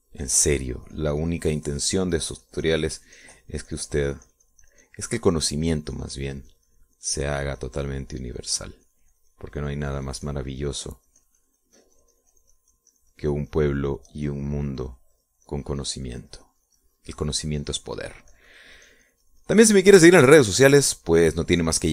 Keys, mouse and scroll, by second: 2.1-21.9 drag.